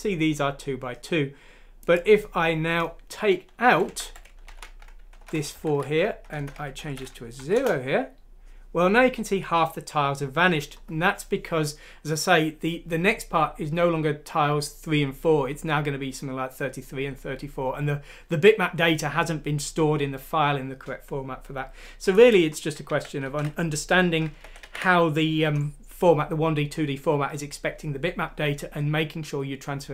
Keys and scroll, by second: 3.6 Left, 3.8 Left, 4.0 Left, 4.4 Right, 5.5 0, 6.7-7.5 typing, 22.8 ctrl+z, 23.2 ctrl+z, 24.4 ctrl+z, 24.6 ctrl+z.